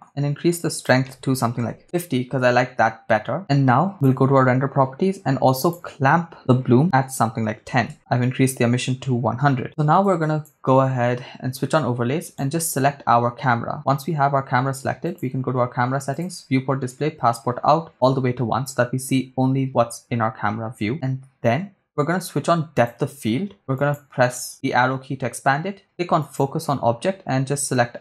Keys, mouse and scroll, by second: 0.7-1.8 drag, 3.9 click, 5.6 click, 7.9 0, 10.2 click, 12.4 click, 12.4 right click, 15.1 click, 16.1 click, 16.5 scroll down 2, 17.3-18.1 drag, 23.0 click, 23.8 click, 26.2 click.